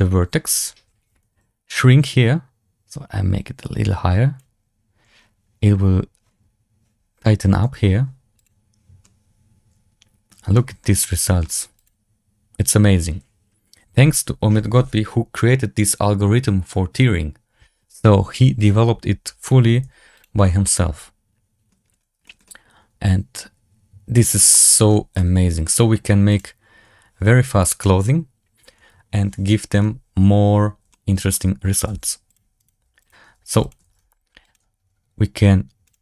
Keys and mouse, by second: 2.1-4.6 drag, 8.9-10.2 middle drag, 10.4 shift+middle drag, 10.7-11.3 middle drag, 11.7 click, 20.5 click, 20.5-21.6 middle drag, 22.1 shift+middle drag, 22.3-24.3 middle drag, 24.4 shift+middle drag, 25.0-25.5 middle drag, 27.2 z, 30.8-31.2 shift+drag, 31.7-33.9 typing, 32.5 right click.